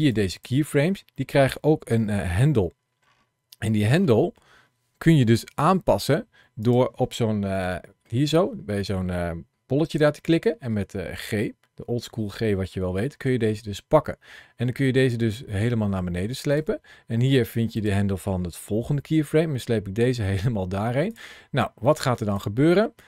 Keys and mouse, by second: 0.0 click, 1.0 middle click, 1.7 KP_Decimal, 3.9 middle click, 5.0 Home, 6.5 click, 7.4 shift+middle click, 13.1 g, 17.6 click, 18.5 g, 20.9 click, 21.7 click.